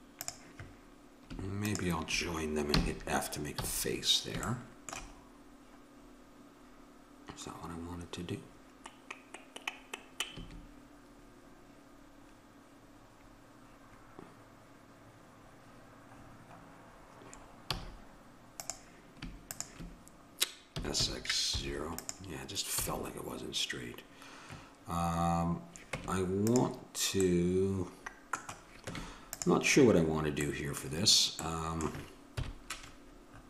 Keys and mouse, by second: 0.1 click, 2.7 f, 3.5 a, 10.4 a, 17.7 a, 18.5-21.6 drag, 20.7 s, 22.7 a, 25.9 Tab, 28.8 Tab, 32.4 KP_1.